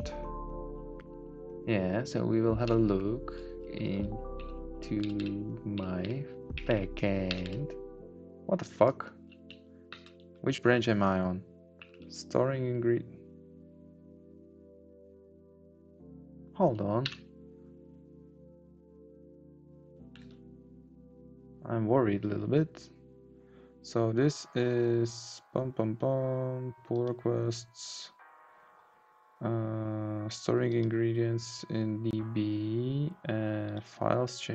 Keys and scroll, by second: 2.7 Down, 3.6 Down, 4.3 Up, 4.7 Down, 5.0 Up, 6.0 Right, 6.5 Down, 6.7 Right, 7.3 Down.